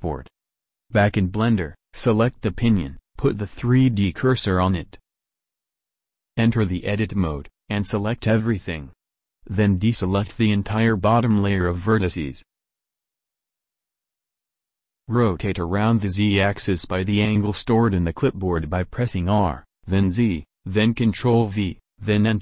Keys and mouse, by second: 1.4 right click, 2.2 Tab, 2.6 a, 4.2 Tab, 4.8 shift+s, 6.8 Tab, 7.7 a, 11.8-17.0 middle drag, 15.9 r.